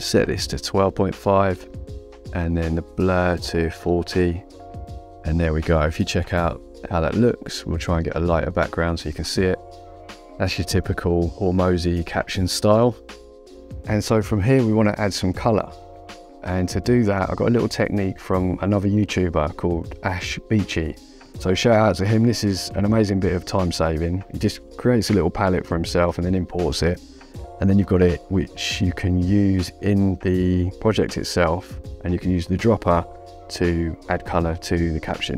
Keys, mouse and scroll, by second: 0.0 click, 1.1 KP_1, 1.3 KP_2, 1.8 KP_Decimal, 2.8 click, 4.0 KP_4, 4.2 KP_0, 4.6 Return, 4.6 KP_Enter, 8.5 click, 13.8 click, 21.4 click, 24.0 ctrl+l, 25.7 click, 29.7 click.